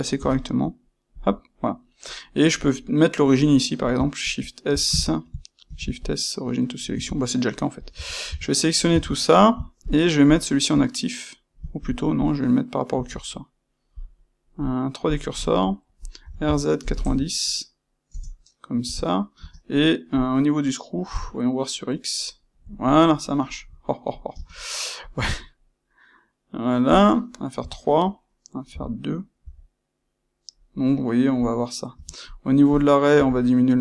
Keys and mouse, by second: 0.2 c, 1.1 ctrl+click, 2.7-3.7 middle drag, 4.1 shift+c, 4.9 Escape, 5.6 shift+s, 7.0 Escape, 7.4 middle click, 7.9 a, 9.8 shift+click, 10.2 shift+click, 11.7 shift+click, 12.2 shift+click, 13.8-22.6 drag, 16.2 f, 18.1 KP_Enter, 18.8 Tab, 19.3 space, 22.6-33.8 ctrl+middle drag.